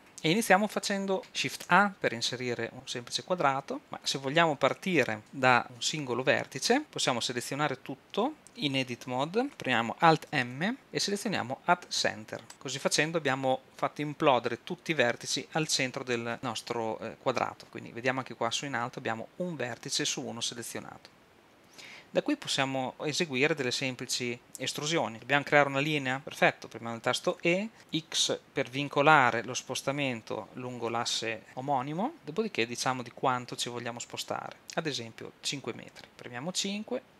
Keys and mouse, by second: 1.2 shift+a, 1.7 shift+a, 6.7 Tab, 10.3 alt+m, 27.3 e.